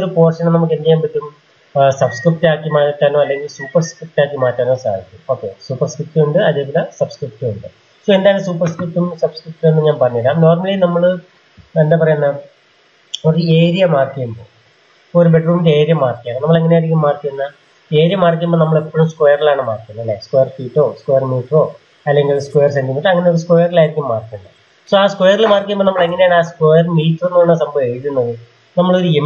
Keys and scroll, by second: 11.8 Return, 28.9 m.